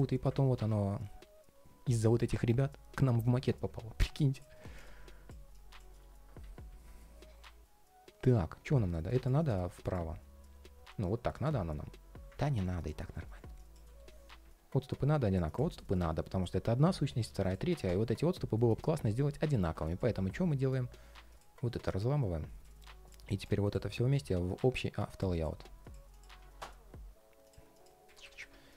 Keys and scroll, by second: 12.1 super+z, 13.6 ctrl+shift+4, 18.4 shift+super+g, 21.5 shift+super+g.